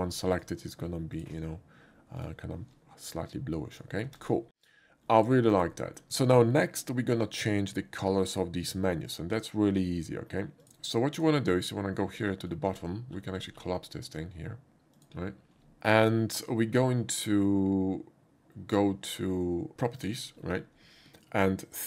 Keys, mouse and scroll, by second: 0.4 click, 1.2 click, 2.2 shift+click, 3.8 shift+click, 4.1 x, 4.2 click, 5.4 shift+middle click, 5.7 shift+middle click, 10.6 click, 11.2 click, 13.6 middle click, 15.0 click, 19.4 middle click, 19.4 scroll down 1, 20.0 click, 20.0 middle click, 20.0 right click.